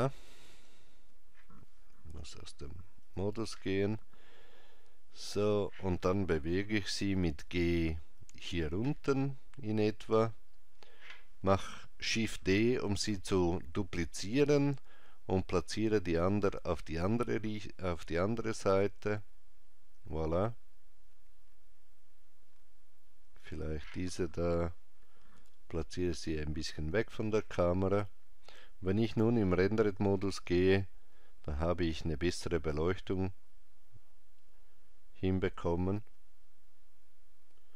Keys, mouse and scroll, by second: 0.5 click, 2.2 Tab, 3.0 click, 7.0 g, 12.8 shift+d, 23.5 click, 25.4 g, 29.1 click.